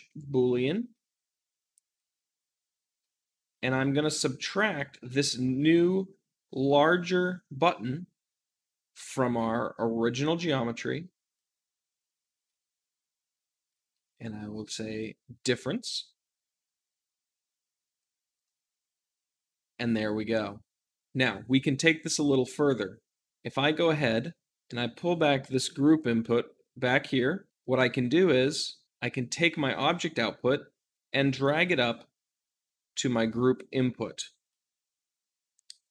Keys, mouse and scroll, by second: 0.0-16.6 drag, 16.6 z, 18.4-23.3 middle drag, 23.3-27.5 drag, 27.5-30.5 shift+middle drag, 30.4-35.7 drag, 35.8-35.9 shift+middle drag.